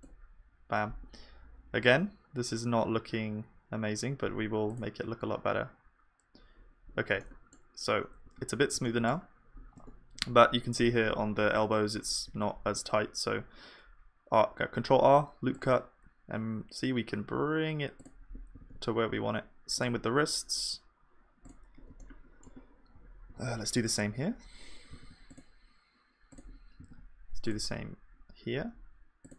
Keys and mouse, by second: 8.3 KP_1, 9.8 Tab, 12.6 ctrl+r.